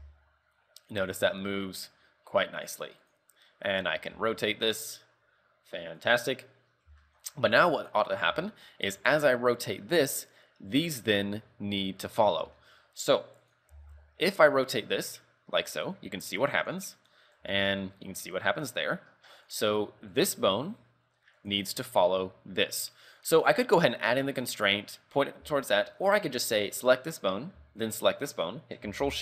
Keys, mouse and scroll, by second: 3.9 right click, 4.2 r, 6.8-8.1 scroll up 5, 7.1 shift+middle click, 8.0 right click, 8.4 r, 10.9 right click, 12.7 shift+middle click, 13.6 right click, 13.8 r, 17.2 right click, 17.5 r, 20.3 right click, 21.5 click, 23.9 click, 25.6 shift+middle click, 26.9 right click, 28.0 shift+right click.